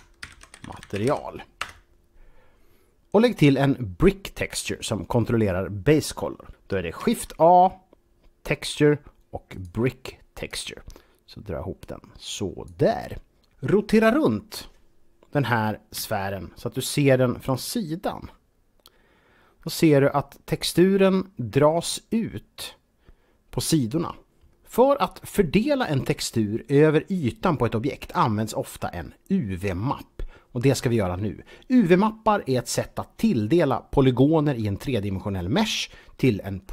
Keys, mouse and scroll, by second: 0.0-0.8 typing, 1.4 Return, 6.9 shift+a, 9.3 click, 10.5 click, 11.8 click, 15.7 KP_Decimal, 17.5-21.6 middle drag.